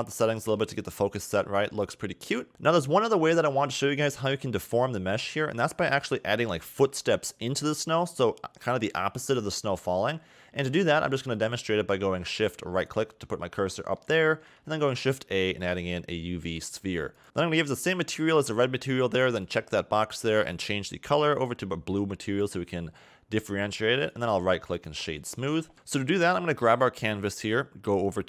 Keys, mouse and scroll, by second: 0.6 a, 0.8 a, 2.5-5.3 scroll up 1, 5.3 shift+middle click, 12.8 shift+right click, 13.7 middle click, 14.3 shift+a, 16.4 s, 17.2 click, 19.4 click, 20.6 click, 24.1 right click, 25.3 a, 25.5 a, 25.7 click.